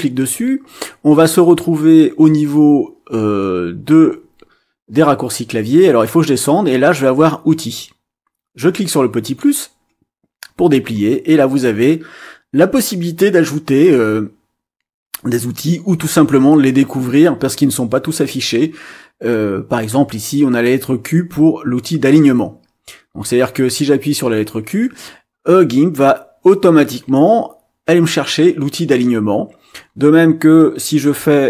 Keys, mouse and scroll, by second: 9.2 click, 10.2-10.9 scroll down 2, 10.9-11.4 scroll down 1, 11.4-12.0 scroll down 1, 15.8-16.1 scroll down 2, 18.0-18.6 scroll down 2, 18.8-19.2 scroll down 2, 19.7 scroll up 2, 29.4-30.1 scroll down 2, 30.4 scroll down 2.